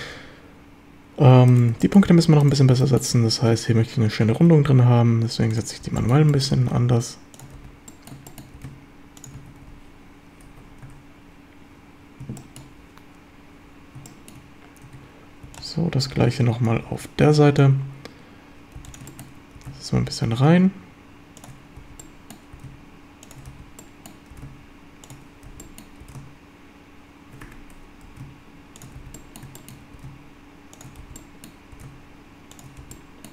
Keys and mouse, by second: 1.8 shift+click, 2.8 shift+drag, 4.3 g, 5.5 shift+click, 5.8 b, 6.4 shift+click, 6.7 g, 7.4 shift+click, 7.6 b, 8.3 shift+drag, 8.6 g, 9.2 shift+click, 9.4 a, 9.7 b, 10.9 Tab, 12.4 shift+middle drag, 14.1 shift+middle drag, 14.9 Tab, 15.5 b, 16.9 b, 18.8 b, 19.2 shift+middle drag, 19.6 g, 21.4 shift+click, 21.8 b, 22.6 g, 23.3 shift+click, 23.5 b, 24.3 g, 25.1 shift+click, 25.5 b, 26.0 g, 27.5 Escape, 28.1 g, 28.8 shift+click, 29.0 b, 29.6 shift+click, 30.0 g, 30.8 shift+click, 31.0 b, 31.8 g, 32.6 shift+click, 32.8 b.